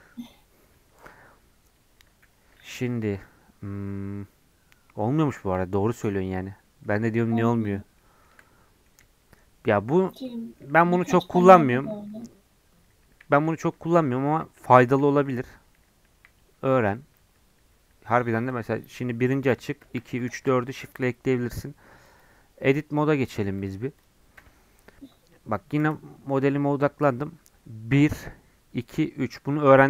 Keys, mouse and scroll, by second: 3.1-6.1 drag, 7.9-10.8 shift+middle drag, 10.8-15.1 typing, 17.1 2, 17.2 3, 17.7 1, 19.8 shift+2, 20.3 shift+4, 22.0-24.3 drag, 24.3 Tab, 25.8 KP_Decimal, 26.9-28.0 scroll down 5, 28.0 1.